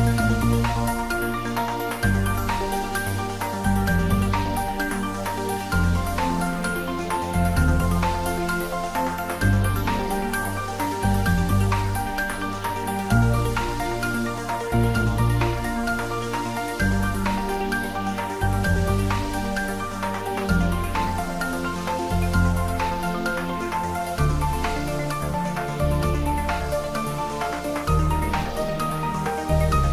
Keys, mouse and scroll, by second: 2.0 click, 2.6 g, 3.0 y, 3.7 x, 4.6 BackSpace, 11.5 Left, 12.0 space, 13.1 scroll up 1, 14.2-15.1 typing, 16.0 click, 16.5 scroll down 1, 18.6 g, 19.0 x, 19.8 Left, 21.0 Return, 22.8 space, 23.7 scroll up 1, 25.0-26.8 middle drag, 26.6-27.7 typing, 28.2 Return, 29.0 Left, 29.5 click.